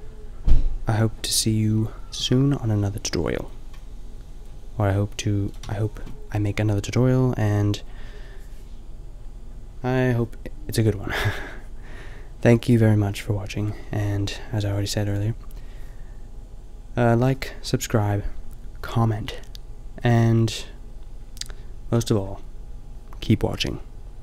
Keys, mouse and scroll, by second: 5.5-8.8 middle drag, 5.7 a.